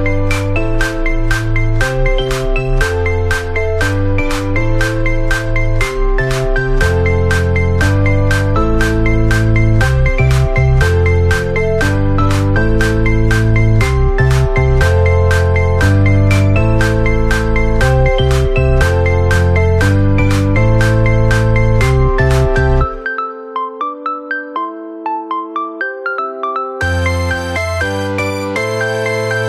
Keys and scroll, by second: 0.3 Down, 2.5 ctrl+[, 3.0 Down, 4.2 Down, 5.1 ctrl+[, 5.2 Up, 5.3 Down, 5.9 ctrl+-, 7.6 Right, 8.0 Left, 8.5 ctrl+=, 10.4 Up, 11.3 Down, 12.0 Up, 13.6 ctrl+-, 16.4 ctrl+z, 16.6 ctrl+=, 16.8 Left, 17.5 ctrl+[, 17.7 Left, 18.0 ctrl+[, 18.2 Left, 19.6 Right, 20.1 Left, 21.4 Down, 21.8 Up, 22.2 Left, 22.6 Up, 23.0 Right, 24.6 Right, 25.0 Left, 25.6 ctrl+-, 25.8 ctrl+=, 26.0 Left, 26.7 Left, 27.8 Left, 28.6 Left.